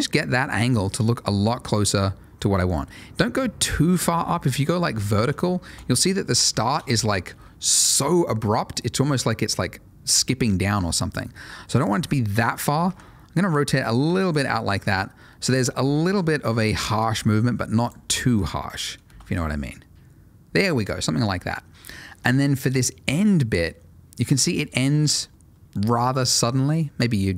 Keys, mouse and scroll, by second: 4.9 click, 5.6 space, 6.4 Escape, 6.7 space, 11.7 click, 12.8 r, 14.2 click, 14.8 space, 15.8 Escape, 16.6 s, 18.3 r, 18.6 click, 19.0 space, 25.8 space.